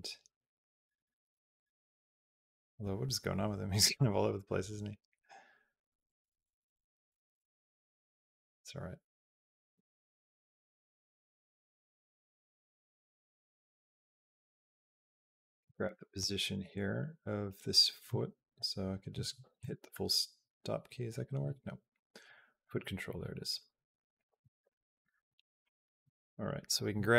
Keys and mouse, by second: 22.1 click, 22.4 click, 24.0 click, 24.5 shift+click, 25.6 click, 26.1 shift+click, 26.4 shift+click.